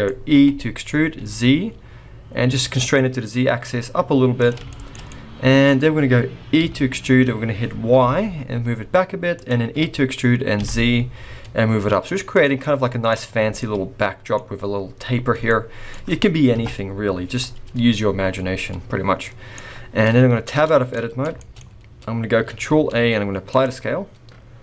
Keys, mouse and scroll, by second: 0.4 e, 4.7 shift+middle click, 5.0 middle click, 6.6 e, 9.7 e, 12.6 middle click, 13.6 middle click, 15.3 scroll down 2, 15.5 middle click, 16.5 KP_0, 17.4-18.4 scroll down 4, 18.5-19.2 scroll down 1, 19.2 middle click, 19.2-20.2 scroll down 4, 20.2-20.5 scroll down 2, 20.5 Tab, 20.9 middle click, 21.4 shift+middle click, 21.6-22.5 scroll up 4, 22.6 ctrl+a.